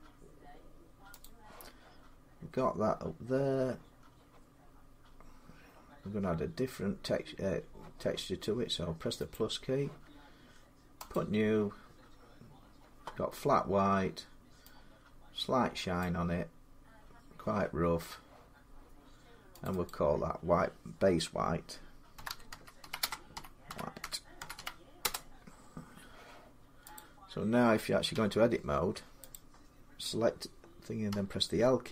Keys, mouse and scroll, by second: 1.0 click, 2.3 click, 2.3 scroll down 2, 2.7-3.1 scroll up 3, 3.1-6.0 scroll, 9.1 click, 10.9 click, 15.8 click, 19.4 click, 19.7 click, 21.9-24.8 typing, 26.8 click, 26.9-27.7 typing, 27.9 Tab, 29.1 click, 30.9 l.